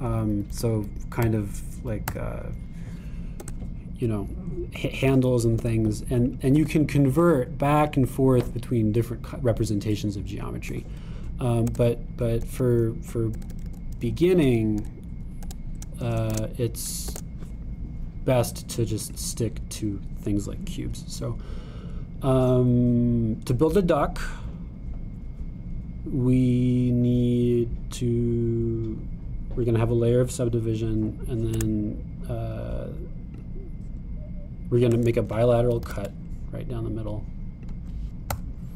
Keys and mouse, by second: 1.3-6.1 drag, 1.5 Down, 1.8 Up, 4.6 Tab, 6.7 e, 7.7 e, 8.4 e, 12.7 Tab, 13.5 super+z, 14.4 super+z, 15.5 super+z, 15.8 super+z, 18.0 shift+a, 23.6-28.7 drag, 28.7-31.3 middle drag, 32.6 Tab, 32.8-34.5 middle drag, 36.9 super+r.